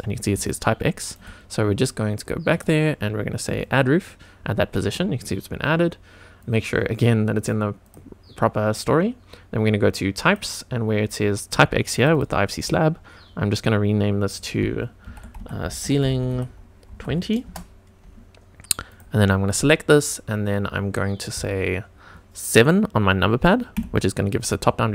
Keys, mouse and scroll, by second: 0.4 shift+right click, 2.4-4.1 drag, 6.4 drag, 7.8 click, 10.2 click, 11.9 click, 12.1-15.3 drag, 16.3-17.4 right drag, 18.8 click, 23.7 KP_7, 23.8 middle click.